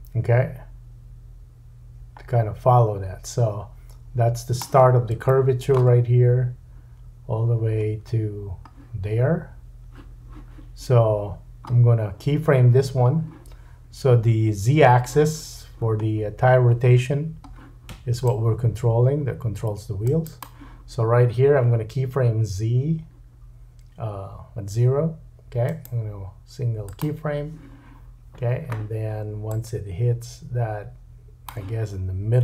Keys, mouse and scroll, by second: 5.3 shift+middle click, 8.0 scroll down 2, 11.3-14.4 scroll up 1, 16.0-17.0 scroll up 3, 17.0-18.2 scroll down 2, 20.4-25.6 middle drag, 25.6-32.4 right drag, 29.5-32.4 drag, 29.5-32.4 middle drag, 31.9-32.4 scroll down 3.